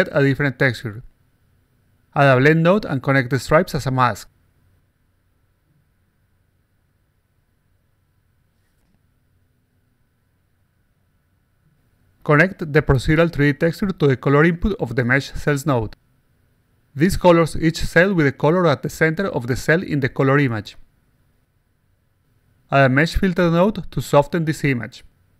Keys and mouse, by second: 0.3 click, 1.2 click, 2.0 click, 2.6 click, 4.0 click, 5.7 click, 6.2 click, 7.1 click, 8.5 click, 9.6-10.3 alt+drag, 9.6-10.3 alt+right drag, 10.5-11.6 alt+drag, 10.5-11.6 alt+right drag, 12.8 click, 14.2 click, 16.2 click, 22.5 click, 23.4-24.4 drag, 25.2 click.